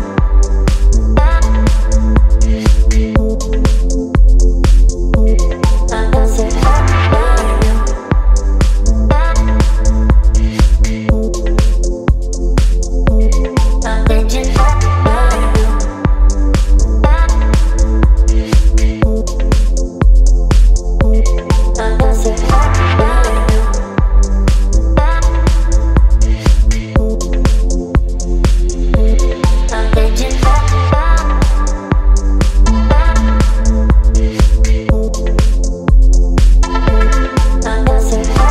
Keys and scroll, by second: 10.2 KP_5, 18.0 space, 21.6 x, 26.2 ctrl+d, 33.5 space, 34.6 ctrl+shift+i, 37.8 ].